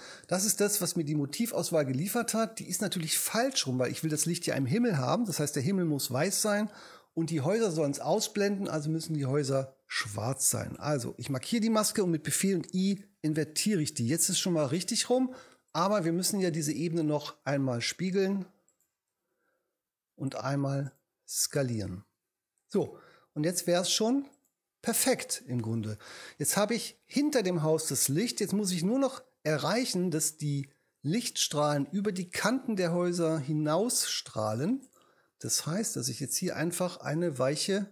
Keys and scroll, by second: 13.3 super+i.